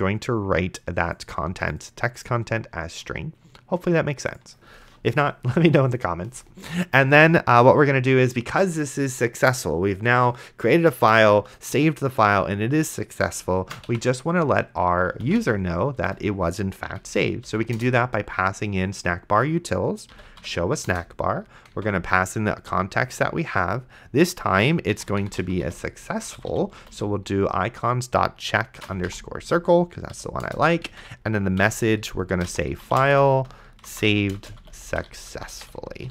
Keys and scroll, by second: 6.6 Return, 13.5-16.2 typing, 17.0 Down, 17.8 Return, 19.9-20.9 typing, 21.7 Tab, 24.9-27.4 typing, 28.7-29.6 typing, 30.1 Down, 30.5 Return, 30.9 Tab, 31.6-36.1 typing.